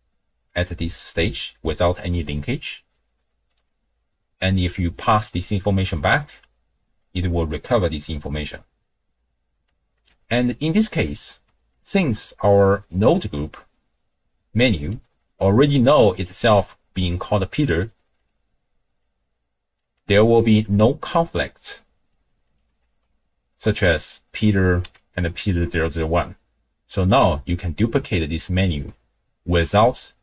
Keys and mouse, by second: 3.7-5.2 drag, 7.0-8.5 drag, 9.5 n, 10.0 n, 10.4 middle click, 11.7 ctrl+click, 14.8-18.1 drag, 19.0-19.8 drag, 20.5 click, 21.6 click, 22.8 ctrl+shift+d, 24.8 n.